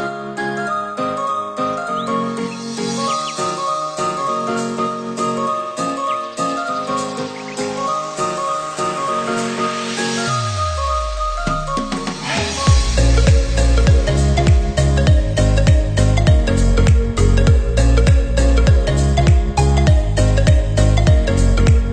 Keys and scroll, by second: 1.3 Delete, 4.2 ctrl+c, 4.4 ctrl+v, 17.1 ctrl+=.